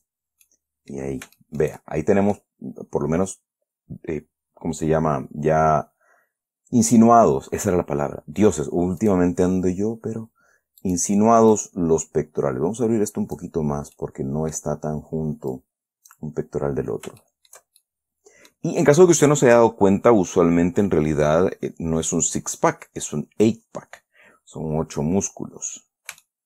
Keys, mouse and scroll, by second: 0.3 click, 0.5-0.8 scroll down 2, 0.8 middle click, 1.7 shift+middle click, 2.1-2.6 shift+scroll down 2, 2.6 middle click, 3.9-4.3 scroll up 2, 4.7-5.7 scroll down 3, 5.8-6.8 scroll up 2, 6.8 scroll up 1, 9.4 right click, 10.0-10.4 scroll down 1, 11.2 right click, 11.9-13.9 drag, 14.0 scroll down 1, 14.3 middle click, 15.9 click, 17.6 shift+middle click, 18.2-19.2 shift+middle drag, 25.0-25.3 scroll up 2, 25.3 scroll down 2, 25.8 scroll up 2.